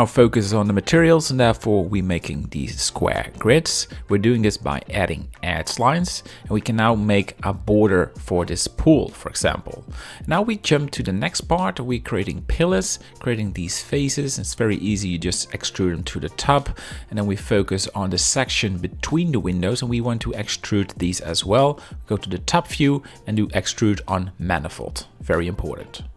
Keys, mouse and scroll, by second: 1.0 shift+middle click, 3.4 click, 3.5 right click, 3.8 shift+middle click, 4.0 middle click, 4.4 ctrl+r, 5.2 click, 5.3 ctrl+3, 5.6-7.1 ctrl+drag, 7.5 KP_1, 7.8 z, 8.0 shift+middle click, 8.7 e, 9.0 ctrl+click, 9.8 middle click, 10.0 z, 10.5 middle click, 12.3 click, 14.2-15.8 typing, 14.6 shift+middle click, 15.1 ctrl+click, 16.1 Tab, 16.9 shift+click, 17.4 c, 17.8 click, 18.6 shift+middle click, 18.6 shift+scroll, 19.3 click, 19.3 right click, 19.8 shift+middle click, 20.4 shift+scroll, 20.6 middle click, 22.5 KP_7, 22.6 z, 22.8 shift+middle click, 23.8 alt+e, 25.7 middle click, 25.9 z, 26.0 middle click.